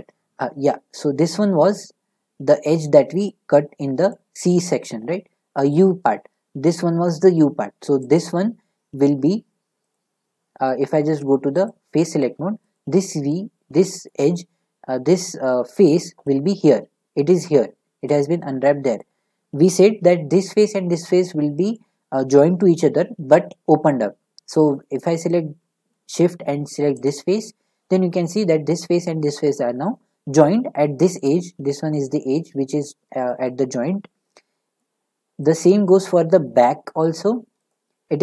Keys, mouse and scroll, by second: 2.8 middle click, 4.1 middle click, 8.1 click, 9.9 click, 11.7-16.0 drag, 19.0-24.8 middle drag, 25.6-27.1 middle drag, 27.1 shift+click, 36.6-36.9 scroll, 36.9 middle click, 37.7 shift+click.